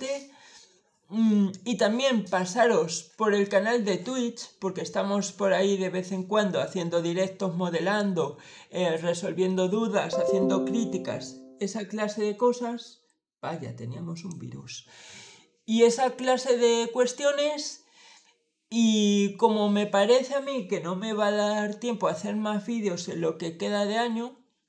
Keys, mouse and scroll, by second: 14.0 click.